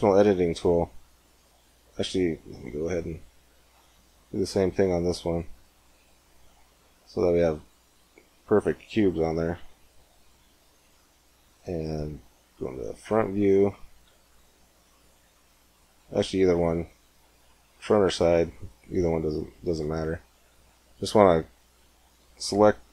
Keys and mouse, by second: 1.5-2.6 middle drag, 2.6 ctrl+r, 2.6 click, 6.3-8.0 middle drag, 9.4 middle click, 9.8-11.1 drag, 11.1 middle click, 11.9 KP_1, 12.5 KP_3, 14.1 KP_1, 14.7 z, 15.8 KP_3, 16.4 KP_1, 17.1 KP_3, 18.9 a, 19.7 b.